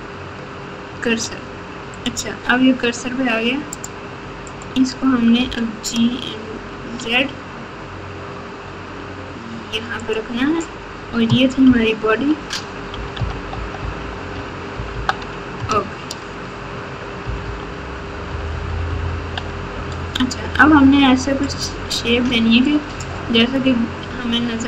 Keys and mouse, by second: 2.0-3.5 right drag, 3.8 click, 4.4 click, 5.3 g, 11.6 ctrl+KP_6, 12.1 ctrl+KP_6, 13.1 ctrl+KP_6, 13.1 ctrl+KP_4, 13.5 ctrl+KP_8, 13.8 ctrl+KP_8, 14.0 ctrl+KP_8, 14.7 ctrl+KP_4, 14.9 ctrl+KP_4, 15.6 KP_Add, 16.1 KP_Add, 17.2 ctrl+KP_4, 17.4 ctrl+KP_4, 18.2 ctrl+KP_8, 18.5 ctrl+KP_8, 18.6 ctrl+KP_8, 19.0 ctrl+KP_8.